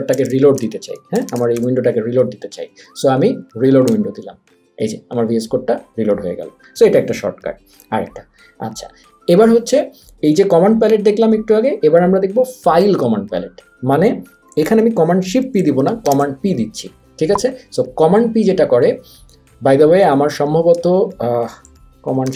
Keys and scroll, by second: 0.0-2.1 typing, 3.5 Down, 3.9 Return.